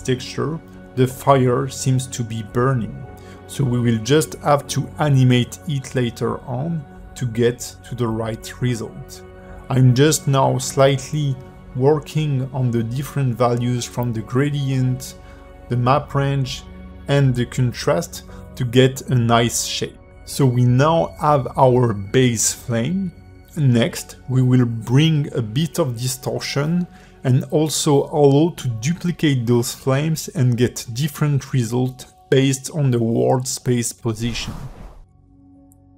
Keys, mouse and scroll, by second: 0.1 click, 0.7 scroll down 5, 0.8 shift+middle click, 1.2 click, 3.0 shift+middle click, 3.3 ctrl+shift+click, 3.8 shift+middle click, 4.1 scroll up 2, 5.1 click, 5.9 ctrl+shift+click, 7.7 click, 8.3-8.6 scroll up 4, 8.6 click, 9.9 click, 10.8 click, 12.6 click, 13.5 scroll down 5, 13.6 shift+middle click, 14.2 click, 15.1-16.1 scroll up 5, 15.2 shift+middle click, 15.6 click, 16.3-16.6 scroll down 10, 16.6 shift+middle click, 16.8 click, 19.8-20.4 scroll up 1, 21.3-22.8 scroll up 6, 21.7 click, 22.4 click, 23.2 click, 23.9 shift+middle click, 24.8 click, 26.3 click, 29.2 click.